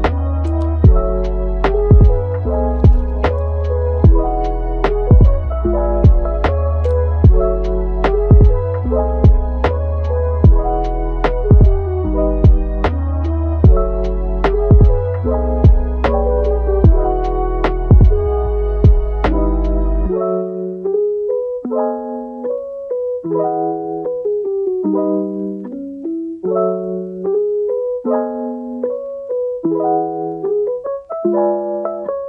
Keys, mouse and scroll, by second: 1.3 click, 1.8 scroll down 4, 2.3 click, 2.6 click, 3.2-4.6 drag, 5.4 click, 8.1 scroll up 2, 8.5 Tab, 9.3 alt+s, 10.6 middle click, 11.2 alt+s, 13.3 click, 14.0-15.9 drag, 15.9 middle click, 16.3-17.5 scroll down 4, 17.5-20.6 drag, 20.6 scroll up 2, 20.8 middle click, 21.4 scroll up 1, 21.6-23.2 middle drag, 23.2-32.2 drag.